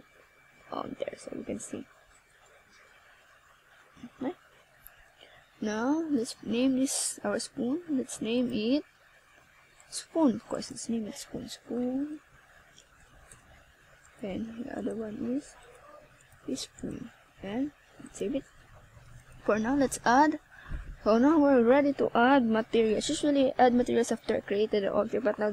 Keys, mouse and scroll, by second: 2.4 ctrl+s, 3.0 middle click, 4.8 click, 5.5 click, 8.7 middle click, 10.2 r, 11.9 click, 12.2 middle click, 14.1 click, 22.0 middle click, 23.3 click.